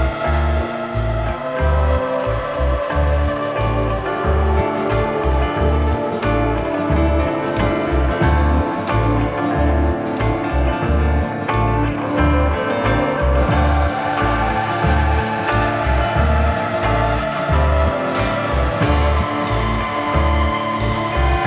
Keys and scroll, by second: 5.0 Escape, 6.9 Escape, 9.0 F3.